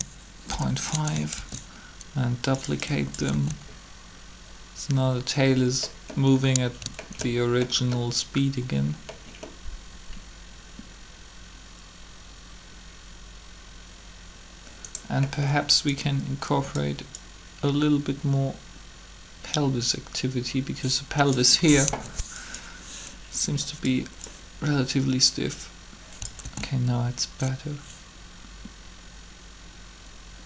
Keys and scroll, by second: 0.0-1.3 typing, 3.3 alt+a, 21.8 3, 26.4 alt+a.